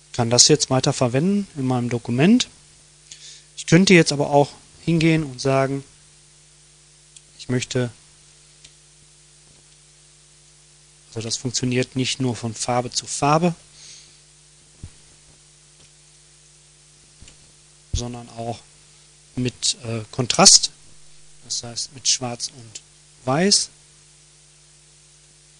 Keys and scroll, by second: 7.8 ctrl+d, 13.9 ctrl+shift+g, 15.4 Delete.